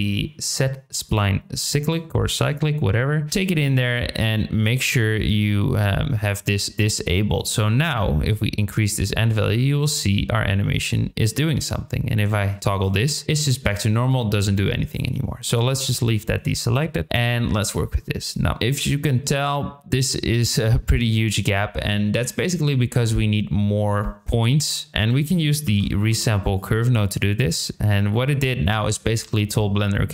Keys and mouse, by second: 3.3 click, 7.4-9.8 drag, 12.7 click, 14.1 click, 15.6 click, 17.0-18.3 drag, 24.9 shift+a.